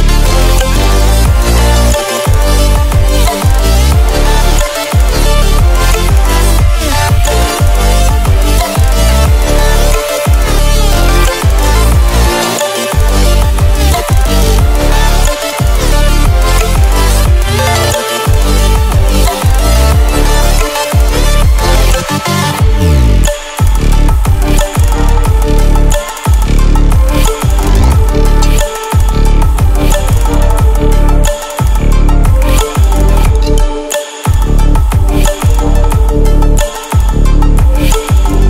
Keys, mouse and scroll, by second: 1.9 click, 3.1 ctrl+alt+scroll down 1, 4.6 click, 7.1-8.4 right drag, 8.5 click, 9.2-9.9 ctrl+alt+scroll down 2, 9.9-10.5 click, 10.9 Delete, 11.6-12.2 click, 12.6-14.3 drag, 15.1 ctrl+scroll up 1, 16.7 ctrl+alt+scroll up 1, 18.3 click, 21.1 ctrl+w, 21.3 ctrl+w, 24.2 ctrl+w, 25.7-38.4 drag.